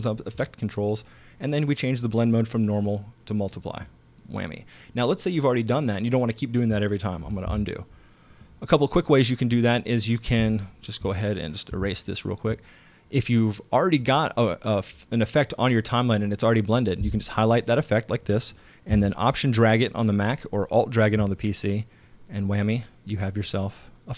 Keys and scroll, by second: 7.5 super+z, 11.7 BackSpace.